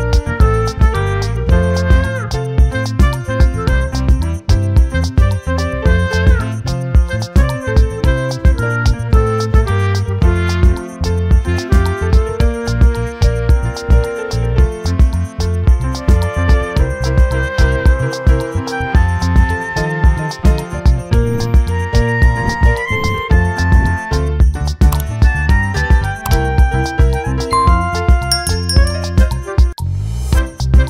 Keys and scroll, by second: 7.4 ctrl+t.